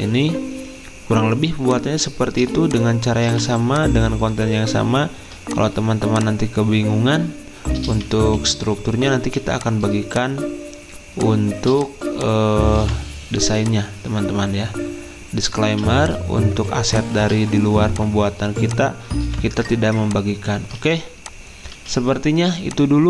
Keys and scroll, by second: 4.4 z, 8.3 Escape, 18.8 z, 20.8 ctrl+z, 21.8 z.